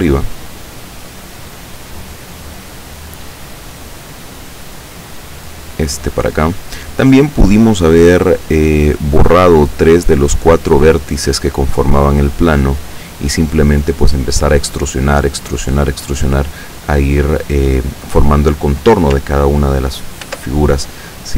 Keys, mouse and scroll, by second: 1.7-3.2 drag, 3.5-4.9 drag, 5.8 right click, 6.5-8.7 drag, 9.2-11.7 drag, 12.3-13.5 drag, 20.3 ctrl+r, 20.8 ctrl+click.